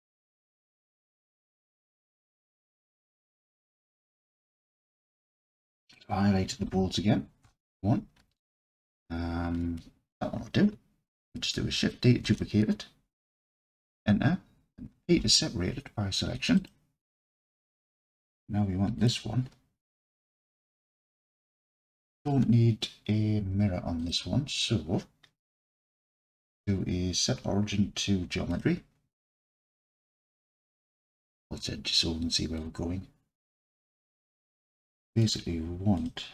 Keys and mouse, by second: 0.8 click, 1.9-3.7 alt+drag, 5.1-7.4 drag, 7.4 KP_1, 8.2 Tab, 12.3 shift+d, 13.2 KP_Enter, 15.2 p, 17.4 Tab, 19.0 click, 24.0 click, 25.9-28.6 right drag, 31.2 alt+z, 32.6-34.7 drag, 35.2 click, 36.0 click.